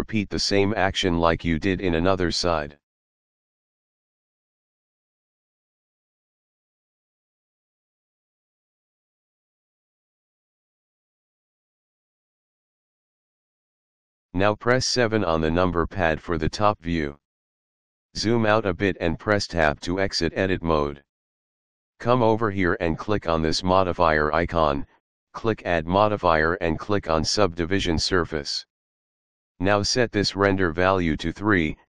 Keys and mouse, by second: 0.0 shift+middle click, 1.8 ctrl+r, 2.3 click, 2.7 right click, 3.7 ctrl+r, 4.3 click, 4.6 right click, 5.5 ctrl+r, 6.2 click, 6.8 right click, 7.7 ctrl+r, 8.3 click, 8.7 right click, 9.6 ctrl+r, 10.2 click, 10.6 right click, 11.8 ctrl+r, 12.5 click, 13.0 right click, 15.1 KP_7, 19.9 Tab, 24.5 click, 27.2 click, 31.0 click.